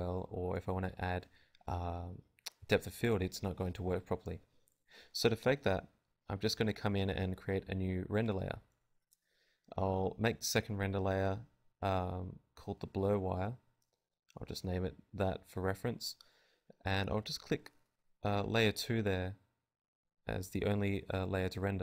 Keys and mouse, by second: 0.0 F11, 0.0 click, 3.8-10.5 drag, 14.3-21.8 drag.